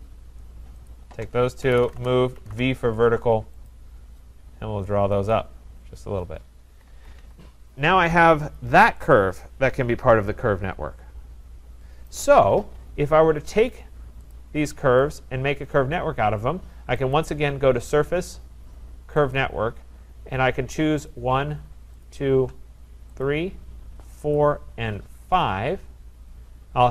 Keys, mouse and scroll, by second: 0.9 shift+click, 1.4-3.0 typing, 3.7 click, 5.3 click, 5.9-6.3 scroll, 6.7 Escape, 6.9 Escape, 7.0-7.7 typing, 7.2 scroll down 3, 8.6 click, 12.1 right click, 14.3 click, 15.1 click, 17.1 click, 19.3 click, 21.1 click, 22.0 shift+click, 23.2 click, 24.4 click, 25.4 click.